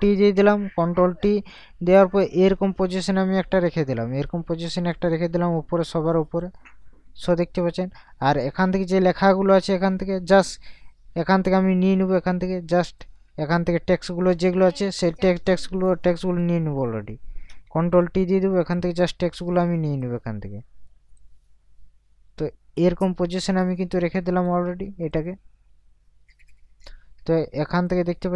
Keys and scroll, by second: 0.1 ctrl+t, 18.1 ctrl+t.